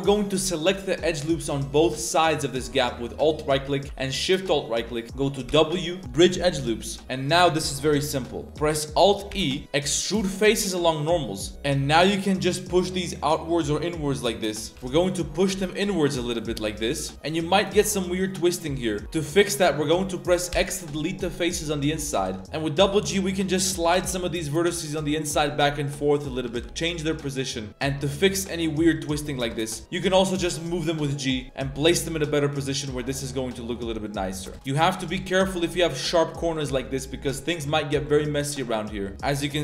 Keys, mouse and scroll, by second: 0.5 alt+click, 1.7 alt+shift+click, 2.7 a, 2.8 a, 3.1 alt+right click, 3.5 middle click, 4.2 alt+shift+right click, 4.7 middle click, 5.4 w, 6.8-7.1 middle drag, 8.0 middle click, 9.3 alt+e, 14.7 alt+s, 16.8 middle click, 17.2 shift+middle drag, 17.5-19.2 middle drag, 19.5 middle click, 19.7 middle click, 20.5 x, 22.1 z, 22.4 1, 22.4 click, 22.4 g, 22.7 g, 23.9 g, 25.0 click, 25.4 g, 26.0-26.3 drag, 26.4 g, 27.3-27.7 middle drag, 27.7 g, 27.8 right click, 28.3 g, 29.4 shift+s, 30.0 g, 31.4-32.1 middle drag, 32.2 z, 32.3-33.0 middle drag, 33.5 Tab, 33.5 middle drag, 34.0-34.3 middle drag, 34.5 Tab, 34.5 shift+click, 34.5-35.0 typing, 34.7 drag, 35.1 click, 35.3 shift+drag, 35.5 middle click, 36.4 b, 37.6 KP_Decimal, 37.9 z, 38.0-38.3 drag, 38.6-39.0 middle drag, 39.1-39.6 middle drag, 39.1 z, 39.1 a.